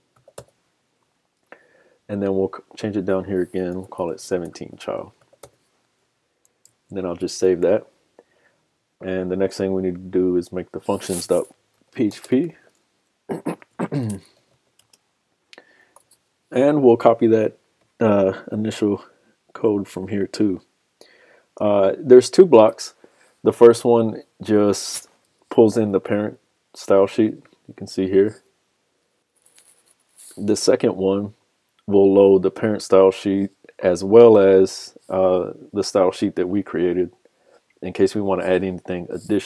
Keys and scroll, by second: 6.7 super+s, 9.7 super+s.